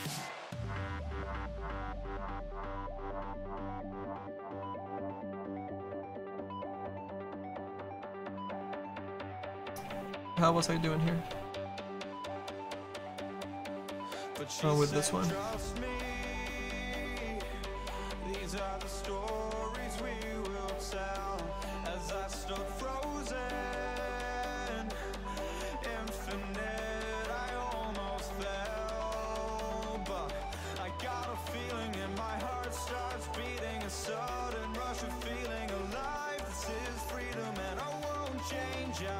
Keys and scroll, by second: 10.5 ctrl+z, 10.8 ctrl+z, 11.4 ctrl+z, 22.4 ctrl+z.